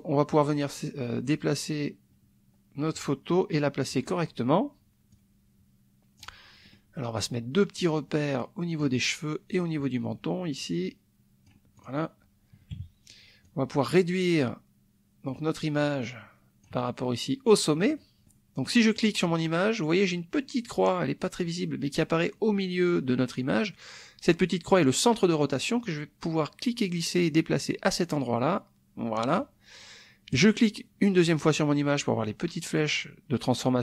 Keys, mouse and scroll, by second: 0.3-4.0 drag, 5.1-6.4 drag, 6.7 middle click, 7.8-9.0 drag, 9.5-11.6 drag, 11.7 click, 12.7 -, 13.4-15.4 drag, 15.8-16.8 drag, 18.0 middle click, 19.0 click, 25.8-29.5 drag, 30.3 click.